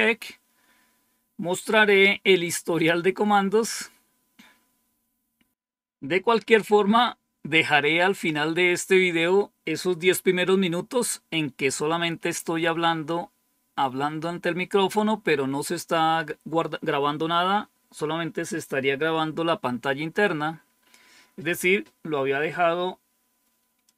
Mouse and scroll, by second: 23.7 click.